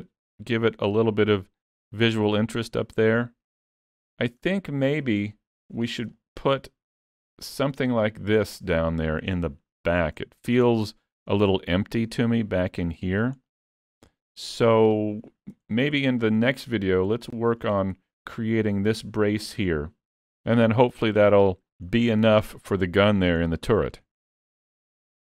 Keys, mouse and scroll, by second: 4.5-5.4 scroll down 7, 5.4 shift+middle click, 5.8-6.2 scroll up 3, 6.2 shift+middle click, 7.0-7.4 scroll down 1, 9.5 shift+middle click, 10.0 scroll up 4, 10.3 shift+middle click, 10.7 middle click, 11.6 middle click, 11.8 shift+middle click, 15.4 scroll down 1, 15.8 shift+middle click, 15.9 shift+middle click, 17.1 scroll up 2, 17.4 shift+middle click, 20.8 middle click, 21.9 scroll down 4, 22.4 shift+middle click, 22.8 middle click.